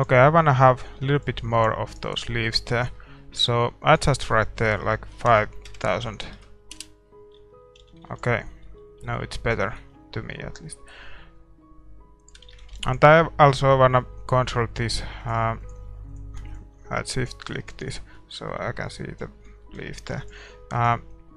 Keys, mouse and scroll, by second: 0.2 ctrl+s, 0.2 middle click, 1.9 ctrl+s, 1.9-6.8 right drag, 7.5-11.3 middle drag, 7.8 a, 8.4 ctrl+s, 10.0 shift+z, 12.6-19.2 drag, 12.7 shift+z, 13.2 ctrl+s, 13.2-15.2 middle drag, 17.7-20.8 middle drag, 20.8 ctrl+s, 20.8-21.3 drag, 20.8-21.3 right drag.